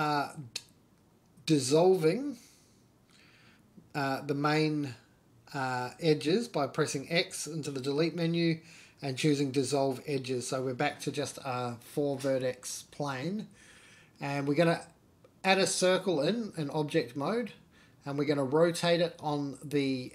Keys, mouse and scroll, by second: 0.1 alt+shift+click, 1.3 alt+shift+click, 2.0 alt+shift+click, 2.9 alt+shift+click, 4.0 alt+shift+click, 4.8 alt+shift+click, 5.3 x, 10.0 x, 11.3-11.8 scroll down 2, 11.5 middle drag, 12.0 Tab, 12.3 Tab, 12.5 shift+middle click, 12.5 shift+scroll up 1, 12.8 shift+a, 16.7 r.